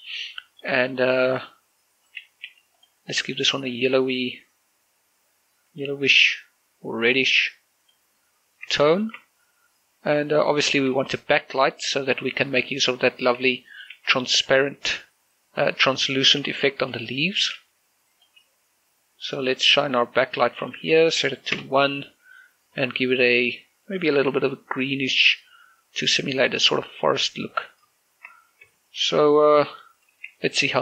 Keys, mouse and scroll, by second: 0.5 shift+middle click, 1.3 right click, 2.5 g, 2.9-8.9 drag, 8.9 shift+middle click, 10.9 shift+d, 11.4 click, 11.7 r, 12.8 click, 13.5 r, 13.8 click, 14.0 g, 14.4 click, 14.9 r, 15.9 click, 17.6 r, 18.2 click, 18.5 g, 19.3 click, 19.6 r, 19.9 click, 21.0 1, 21.6 Return, 22.8-26.3 drag, 26.3 r, 26.5 click, 26.7 g, 27.6 click, 29.5-30.3 scroll up 1, 30.5 shift+middle click.